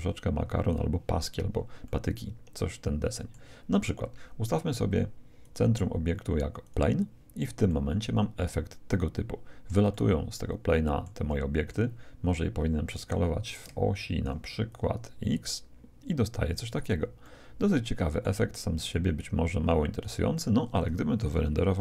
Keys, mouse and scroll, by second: 1.3-1.8 scroll down 1, 1.8-3.8 middle drag, 3.8-5.4 scroll down 1, 5.4-7.3 drag, 5.4-7.0 middle drag, 7.6-9.6 middle drag, 9.9-13.1 middle drag, 12.9-16.4 drag, 17.2-19.2 middle drag, 18.9-20.7 drag, 20.3 middle click.